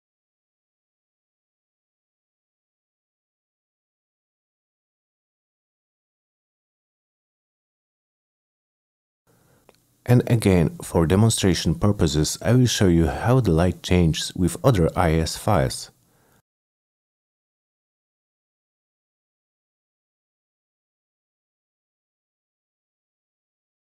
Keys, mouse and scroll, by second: 0.7 click, 1.3 click, 1.9 click, 2.2 F3, 2.7 click, 2.8 middle click, 3.5 click, 3.9 click, 4.1 click, 4.2 c, 4.4 F3, 5.4 F9, 10.0 click, 18.7 click, 19.2 middle click, 19.5 click, 20.6 click, 21.2 click, 22.0 click, 22.1 click, 23.5 click.